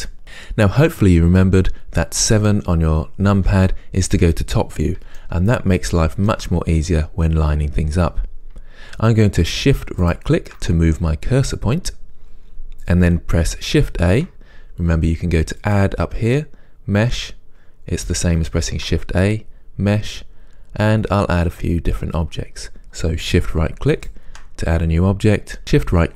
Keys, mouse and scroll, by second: 3.4-10.1 middle drag, 3.4 KP_7, 10.1 shift+right click, 14.1 shift+a, 15.7-24.0 drag, 18.7 shift+a, 24.0 shift+right click.